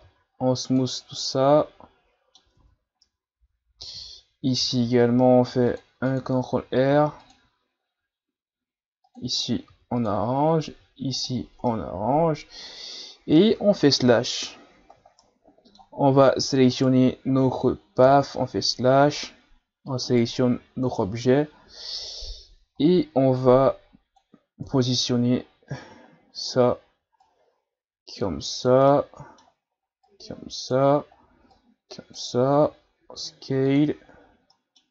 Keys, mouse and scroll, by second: 0.0 w, 1.2-2.6 middle drag, 2.6 Tab, 3.0-4.4 middle drag, 4.4 ctrl+r, 6.9 ctrl+r, 9.7 ctrl+r, 11.2 Tab, 11.7-14.0 middle drag, 14.0 KP_Divide, 15.2-16.7 middle drag, 16.7 shift+right click, 18.1 KP_Divide, 20.1 right click, 21.1-21.4 shift+scroll down 1, 21.4-22.0 scroll up 1, 22.0 Tab, 22.5 a, 22.8 a, 23.4-24.6 drag, 24.6 KP_3, 25.5-26.1 ctrl+scroll down 2, 26.1 shift+scroll down 4, 27.2 click, 28.9-30.0 middle drag, 30.0-32.4 drag, 32.4 s, 34.3 ctrl+scroll down 2, 34.5 middle click.